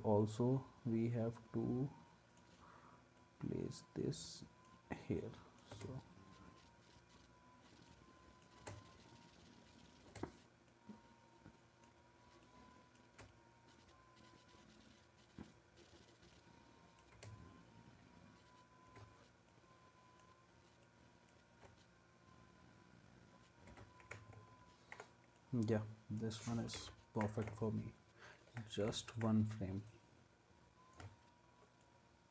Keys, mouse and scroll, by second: 5.7 space, 8.6 space, 10.1 space, 13.1 space, 17.1 space, 18.9 space, 21.5 space, 23.7 space.